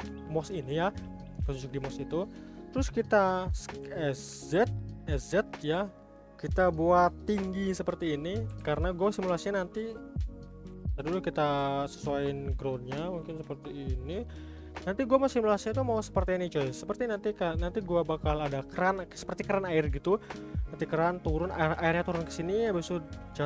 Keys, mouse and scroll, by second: 1.5-1.9 scroll down 2, 1.9-2.3 scroll up 4, 2.3-2.8 scroll down 4, 2.8-3.8 middle drag, 3.8 s, 6.2-8.5 middle drag, 8.5 g, 9.8-10.7 middle drag, 10.7 g, 12.2 middle click, 13.2 g, 14.2-14.7 middle drag, 14.7-15.0 scroll down 3, 15.0-15.4 middle drag, 15.4-15.8 scroll up 2, 15.8-16.6 shift+middle drag, 16.6-17.4 scroll up 1, 17.4 click.